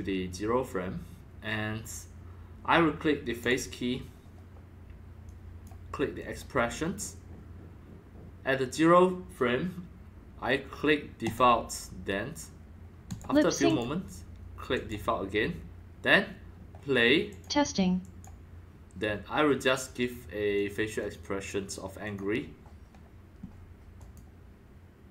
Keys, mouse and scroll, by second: 0.1-2.8 drag, 3.4 click, 5.2-5.6 drag, 6.2 click, 11.2 click, 13.1 click, 13.7 click, 14.7 click, 17.3 click, 18.0 click, 20.5 click, 21.0 click, 22.0 click, 24.0 click.